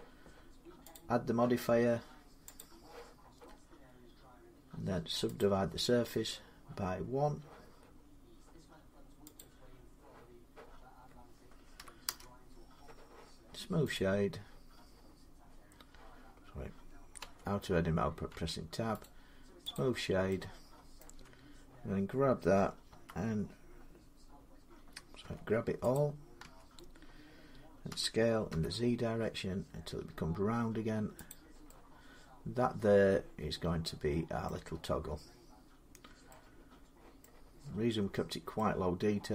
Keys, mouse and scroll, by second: 0.7 click, 2.4 click, 5.2 click, 9.2 click, 11.6-11.9 typing, 11.8 Return, 13.7 right click, 17.0 Tab, 18.1 Tab, 18.8 right click, 19.5 click, 20.8 middle click, 20.9 Tab, 22.7 s, 25.0 Tab, 25.7 click, 26.2 Tab, 27.7-28.3 typing, 31.1 click, 31.1 s, 34.2 middle click, 34.4-36.1 scroll down 6, 36.1 scroll down 2, 36.3 scroll up 8, 37.0-39.3 middle click, 37.3-37.9 scroll down 10, 38.7 scroll up 3.